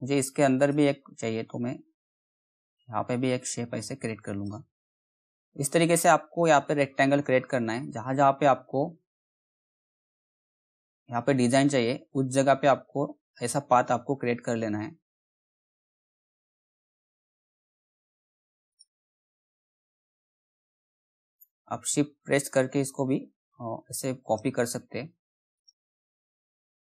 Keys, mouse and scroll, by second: 0.5 click, 1.4-2.2 scroll up 1, 2.2-5.1 drag, 5.1-5.4 scroll down 1, 5.4 middle click, 7.8-14.8 drag, 18.6 click, 20.5 shift+click, 25.5 click.